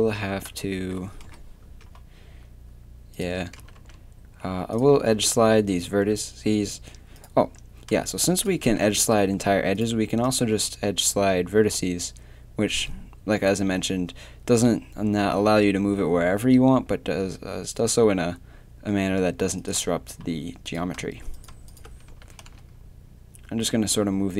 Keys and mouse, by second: 0.0 Tab, 1.2 KP_3, 1.6 Tab, 3.6 g, 5.9 a, 8.7 g, 10.5 g, 20.7-22.1 right drag, 22.1 g.